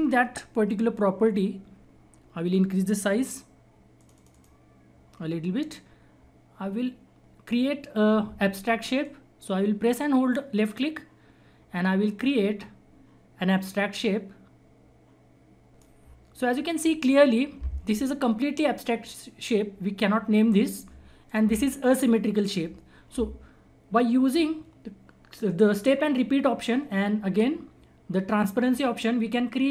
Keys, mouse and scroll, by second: 0.7-2.5 scroll up 1, 3.9-5.0 scroll up 1, 5.0-6.1 scroll up 1, 6.1-6.8 scroll down 1, 6.8-7.3 scroll up 1, 7.6 scroll down 1, 9.0-18.3 drag, 21.2 click, 21.2 click, 22.9-23.4 scroll up 1, 23.4-25.3 scroll down 1.